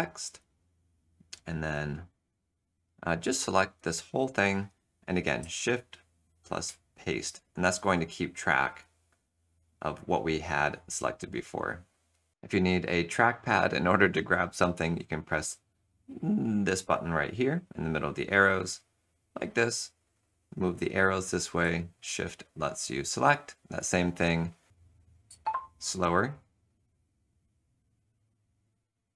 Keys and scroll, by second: 6.6 ctrl+shift+v, 20.0 Right, 20.5 Right, 20.7 Right, 22.0 shift+Right, 22.2 shift+Right, 22.6 shift+Right, 22.8 shift+Right, 25.3 super+h.